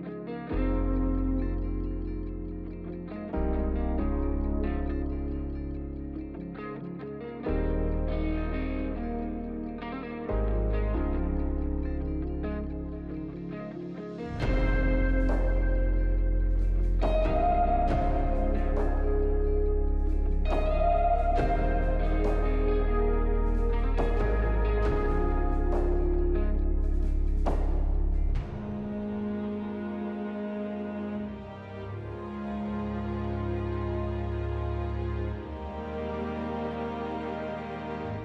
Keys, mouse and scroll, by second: 5.1 5, 5.3 Return, 11.7 1, 11.9 Return, 15.1-16.2 scroll up 3, 16.2-17.0 scroll down 2, 17.0 scroll down 1, 22.4-23.2 typing.